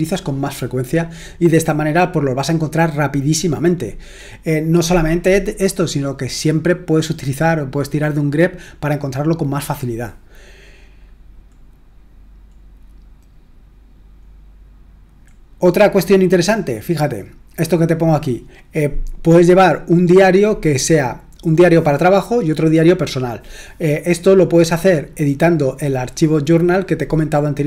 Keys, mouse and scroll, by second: 12.1 scroll down 1, 14.3 scroll down 1, 15.3-17.8 scroll up 1, 17.8-27.6 scroll up 1.